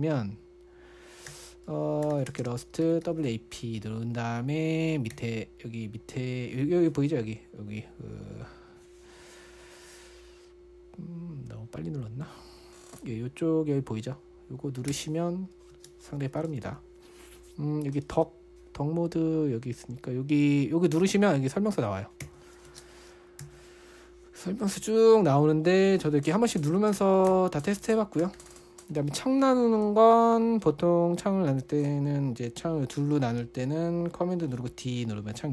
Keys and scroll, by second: 0.0-0.1 typing, 1.7-4.2 typing, 5.5 typing, 15.9-17.4 typing, 22.6-24.5 typing, 26.4-29.4 typing, 35.0 super+d.